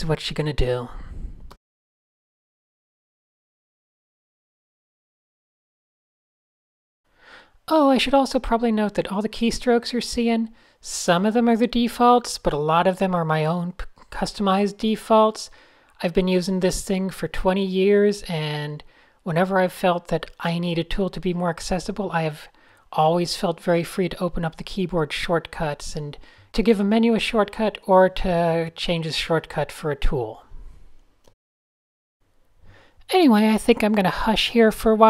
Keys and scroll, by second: 1.9 alt+super+b, 2.5-2.8 Down, 3.6 shift+super+a, 3.6-5.2 typing, 4.9 shift+super+a, 5.8 super+z, 6.9 super+z, 7.2-8.0 typing, 8.0 shift+super+a, 8.6 super+z, 9.1 a, 9.8 shift+super+a, 10.0 n, 10.8 super+z, 11.3 a, 11.7 p, 12.8 shift+super+a, 13.3 n, 13.4 Tab, 13.5 super+space, 15.0 super+z, 17.0 d, 17.9 super+z, 19.4 super+0, 20.0 v, 20.4 super+g, 20.6 Tab, 24.1 s, 25.1 super+h, 25.3 super+space, 25.4 super+space, 25.6 super+space, 26.7 super+0, 27.0 Tab, 27.2-28.9 typing, 29.4 super+z, 29.5 super+z, 30.9 Tab, 31.3 Tab, 32.1 Tab, 32.2 Tab, 33.8 d, 34.6 Tab.